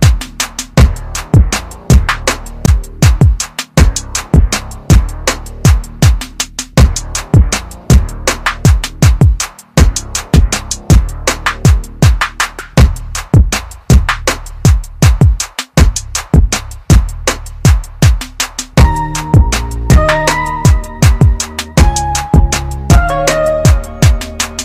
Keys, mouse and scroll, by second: 1.0 ctrl+KP_Add, 1.6 space, 1.9 click, 2.1 space, 3.9 typing, 4.7 click, 9.9-10.2 scroll down 1, 10.7-11.9 scroll up 1, 12.1 ctrl+KP_Subtract, 13.7-14.0 scroll down 1, 14.7-15.1 scroll down 1, 17.2-17.6 scroll up 1, 20.1 click, 22.7 F5, 24.4 click.